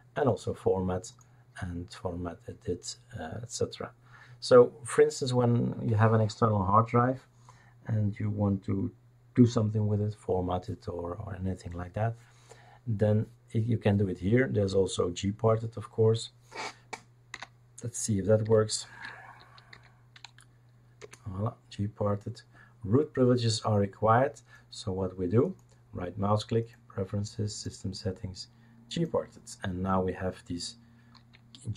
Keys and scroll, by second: 17.3 Escape, 18.9 shift+super+d, 19.4 typing, 21.0 Return.